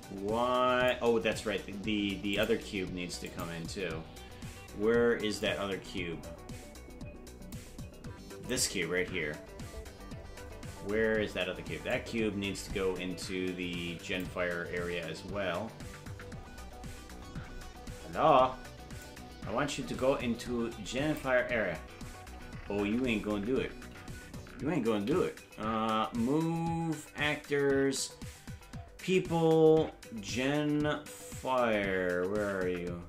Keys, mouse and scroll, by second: 2.3 click, 3.2 click, 5.4-7.5 drag, 8.5 right click, 10.3-11.0 scroll down 18, 11.8-14.4 drag, 12.4-12.8 scroll up 8, 16.4-16.9 scroll down 8, 17.1-17.4 scroll up 2, 17.5-18.0 scroll down 3, 19.0-21.3 drag, 19.5-20.1 scroll up 3, 22.6-23.5 scroll down 12, 24.9 m.